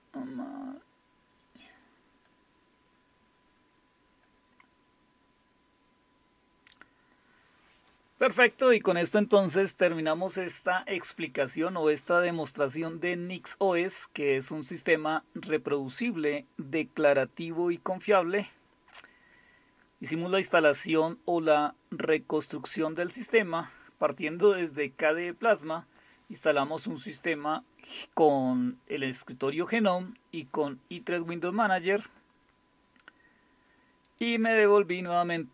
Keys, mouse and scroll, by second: 18.9-20.8 scroll down 3, 20.8-22.3 scroll up 1, 22.3-26.5 scroll up 1, 26.5-27.2 scroll up 1, 27.2-28.8 scroll up 1, 28.8-34.1 scroll up 1, 34.1 click, 34.9 click.